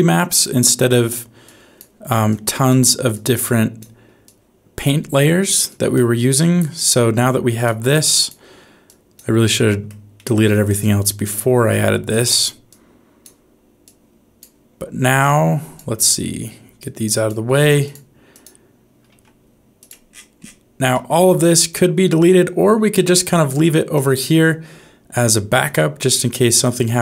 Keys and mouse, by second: 1.4 click, 2.3 click, 3.1 click, 4.3 click, 5.6 click, 6.3-7.5 drag, 8.0 click, 8.8 click, 9.5 middle click, 10.1 middle click, 11.3 click, 12.6 click, 13.8 click, 15.1 click, 16.8 click, 18.3 click, 19.0 g, 20.9 middle click, 21.6-24.0 drag, 24.7 g, 26.0 click, 26.8 g.